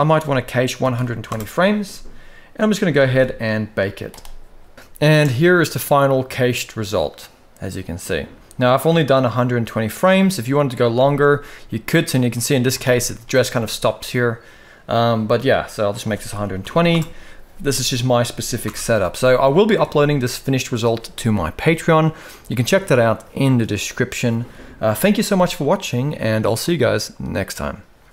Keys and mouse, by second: 2.7 ctrl+s, 3.8 click, 4.7 alt+a, 5.4 space, 10.6 space, 11.1-11.6 middle drag, 12.0-12.4 middle drag, 12.5 shift+middle click, 13.6-14.7 middle drag, 15.7 click, 18.4 shift+Left, 19.2 shift+middle drag, 19.6 middle drag, 24.5 KP_1, 25.2-25.9 shift+middle drag.